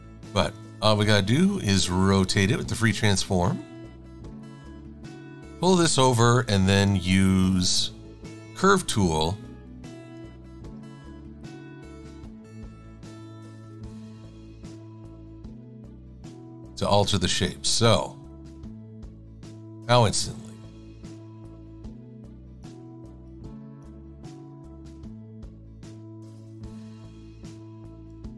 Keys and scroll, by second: 0.2 super+=, 0.6 super+=, 11.0 x.